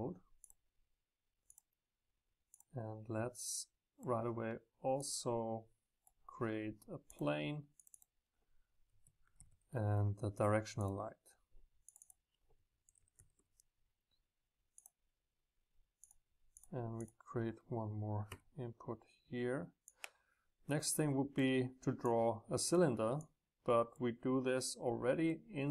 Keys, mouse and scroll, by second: 0.5-7.1 drag, 8.0 click, 8.8 click, 10.8-13.2 drag, 16.1-18.2 drag, 19.9-25.6 drag.